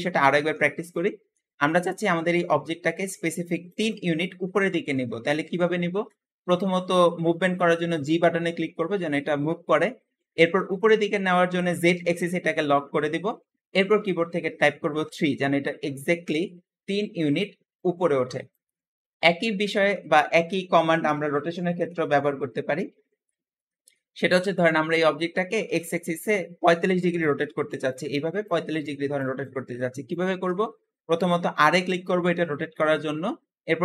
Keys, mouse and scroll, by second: 0.2 ctrl+z, 0.8-1.5 middle drag, 1.5 scroll down 2, 1.8-5.0 shift+middle drag, 5.3-5.7 scroll up 1, 5.7-7.9 shift+middle drag, 7.9 g, 19.6 ctrl+z, 21.7 middle click, 22.3 scroll up 2, 23.1-30.4 shift+middle drag, 31.6 r.